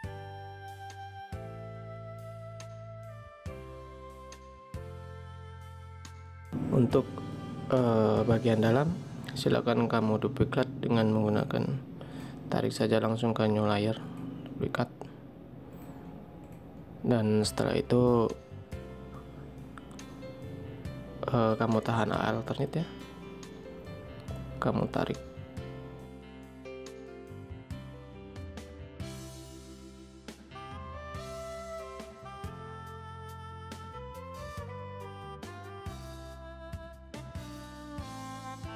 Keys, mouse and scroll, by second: 0.3 ctrl+click, 26.0 alt+click, 30.8 ctrl+click, 33.4 alt+scroll up 1, 33.9 space.